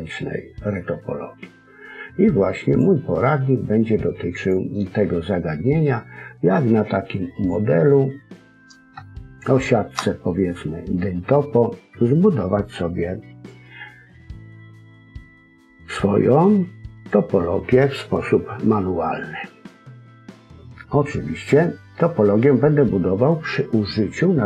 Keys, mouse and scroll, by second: 4.3 click, 8.4 scroll up 1, 9.0 shift+middle click, 9.0-9.6 scroll up 2, 10.4-11.6 scroll up 2, 12.4-12.9 scroll down 2, 12.9-13.5 scroll up 1.